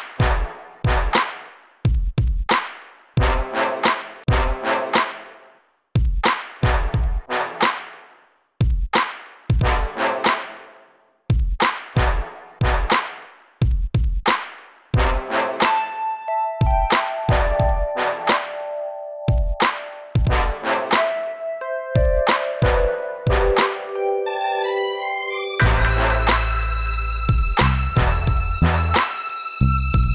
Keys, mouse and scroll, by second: 0.1 scroll up 2, 1.4 scroll down 2, 3.0 scroll up 2, 3.7 scroll down 2, 4.5 click, 5.4 click, 6.7 click, 7.2 click, 7.6 click, 7.7 click, 8.5 scroll up 2, 9.1 click, 9.9 click, 10.7 click, 10.9 click, 11.8 click, 12.9 click, 13.2 click, 15.5 click, 16.6 right click, 17.3 click, 18.2 click, 19.2 click, 20.3 click, 21.0 click, 21.5 scroll down 1, 22.5 scroll down 1, 23.2 scroll down 1, 24.7 scroll down 2, 28.6 click, 28.8 click, 29.3 scroll up 3.